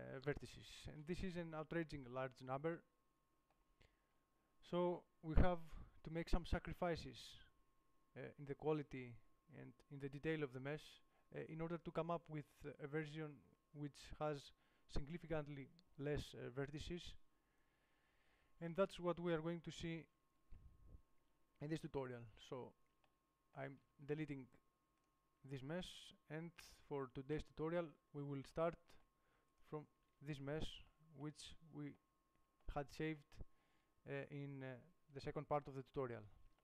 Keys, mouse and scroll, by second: 3.2-4.8 middle drag, 5.9 KP_7, 9.1 middle click, 9.3 middle click, 22.4-23.5 middle drag, 24.1 x, 25.7-26.9 middle drag, 27.7 1, 28.9 middle click, 30.2 Tab, 35.5-36.6 middle drag.